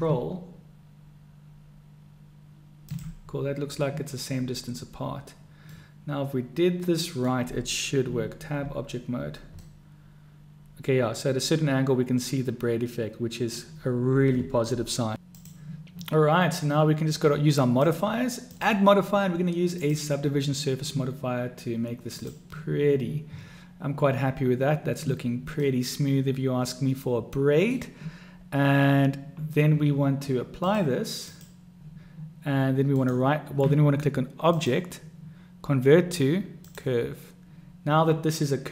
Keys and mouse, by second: 5.9-7.5 middle drag, 8.2 Tab, 9.8 click, 12.3-13.7 drag, 12.3-13.7 right drag, 18.1 click, 18.8-20.2 drag, 22.4 click, 25.9-28.0 middle drag, 30.9-31.7 drag, 33.2 right click, 34.9-37.1 drag.